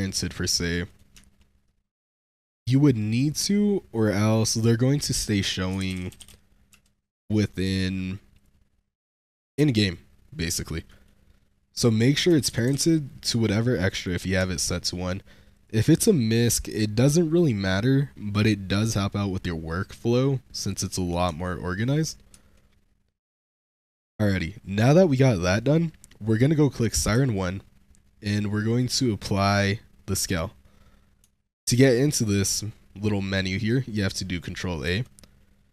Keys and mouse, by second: 0.8 click, 3.1 click, 3.8-6.6 drag, 6.0 s, 7.5 click, 8.2 click, 9.4 shift+middle click, 9.8 shift+click, 10.8 click, 11.7-13.9 drag, 14.4 shift+click, 14.7 shift+click, 15.4 click, 20.5 click, 21.3-21.7 shift+drag, 22.2 Tab, 23.3 shift+middle drag, 25.1 click, 27.0 ctrl+a, 31.6 ctrl+a.